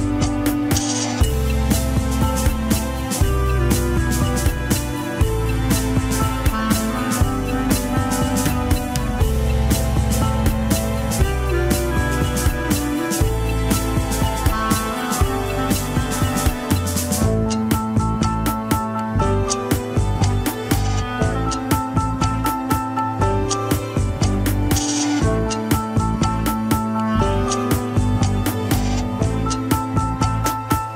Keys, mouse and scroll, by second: 0.0 right click, 0.0 KP_1, 0.3 scroll down 5, 0.7 ctrl+Tab, 1.2 click, 2.5 KP_3, 2.9 alt+z, 3.8-4.2 scroll up 2, 5.5 drag, 5.8 click, 6.1-6.8 scroll up 5, 6.4 shift+middle click, 7.0 Tab, 8.7 Tab, 10.1 click, 10.5 scroll down 4, 10.6 KP_1, 10.9 alt+z, 11.8 click, 12.1 scroll down 4, 12.3-14.0 shift+middle drag, 14.0 ctrl+s, 14.4 drag, 17.1 click, 18.2-19.5 drag, 20.3-22.3 drag, 23.1 ctrl+p.